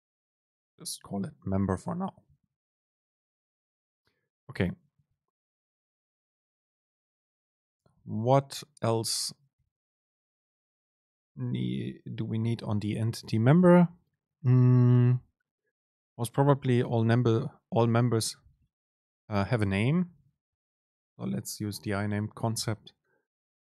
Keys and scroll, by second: 1.7 Down, 7.6 Up, 20.4 super+space.